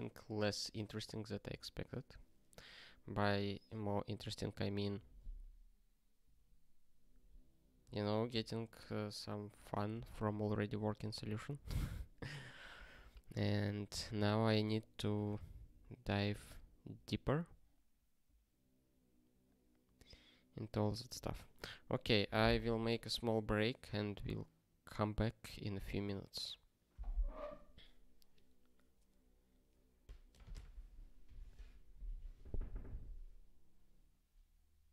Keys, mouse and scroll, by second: 15.6-16.2 scroll down 2, 20.5 scroll down 1, 30.3 click.